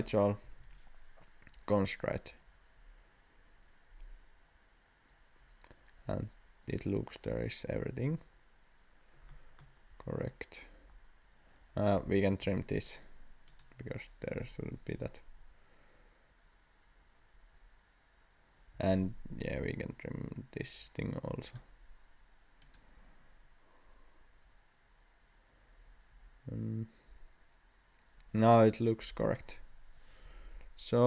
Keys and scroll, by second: 0.4 Escape, 12.3 t, 18.7 Escape, 19.5 t.